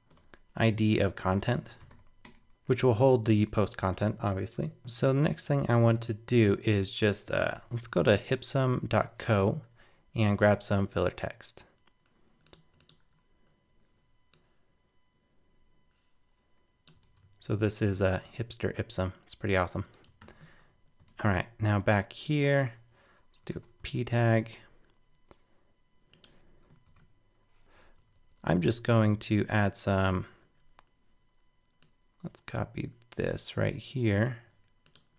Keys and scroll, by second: 7.5 super+t, 17.0 super+c, 20.2 super+w, 21.0 super+Tab, 23.8 super+v, 26.8 alt+super+..